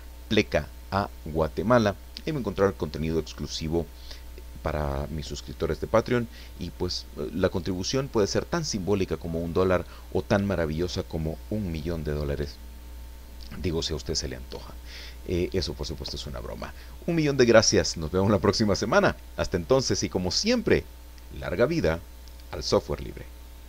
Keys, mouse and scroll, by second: 21.7 click, 23.6 click.